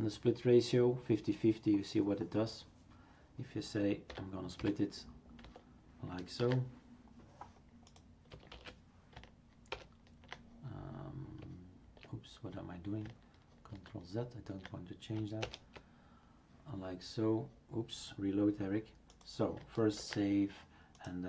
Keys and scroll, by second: 4.1 Delete, 4.6 typing, 6.4 ctrl+s, 8.5 shift+super+q, 9.7 ctrl+Return, 13.7 ctrl+z, 15.4 super+Return, 19.9 ctrl+s.